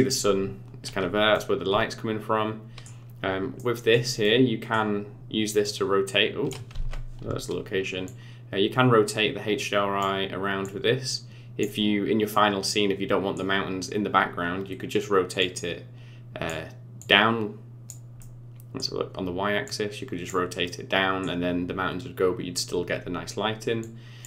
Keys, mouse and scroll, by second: 1.3 middle click, 3.5 middle click, 4.2 middle click, 5.6 click, 6.7 ctrl+z, 8.0 click, 10.6 click, 12.3 middle click, 15.3 click, 16.9 click, 18.1 middle click, 19.6 click, 20.6 middle click, 23.7 click.